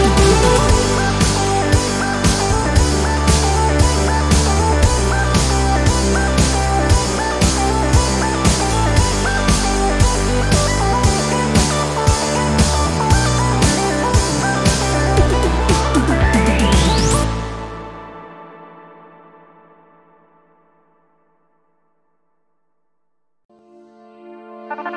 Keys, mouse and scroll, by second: 0.7 ctrl+click, 1.7 Down, 3.4-3.9 scroll up 2, 3.5 click, 4.4 scroll up 2, 4.4 middle click, 4.6 scroll down 2, 5.1 click, 5.5 click, 6.6 alt+Up, 9.7 alt+space, 11.4 space, 13.2 click, 14.3-15.6 drag, 16.7-18.3 ctrl+drag, 18.6 ctrl+KP_5, 20.0 click, 20.7 space, 22.0 click, 23.9 click.